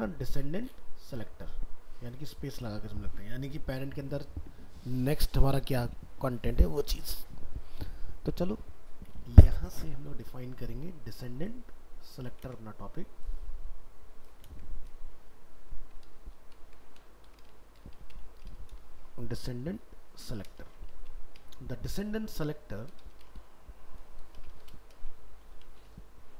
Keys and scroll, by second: 12.4 ctrl+c, 15.6 ctrl+Left, 16.5 ctrl+Right, 19.2 ctrl+Left.